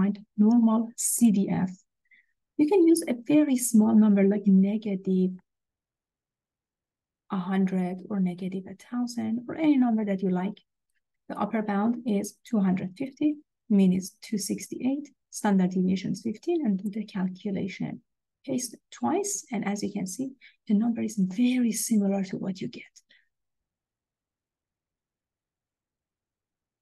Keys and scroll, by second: 1.2 Return, 6.5 1, 8.2 0, 9.5 0, 10.4 0, 11.2 Down, 13.4 Down, 14.6 Down, 16.1 Down, 16.8 Return, 18.0 Return.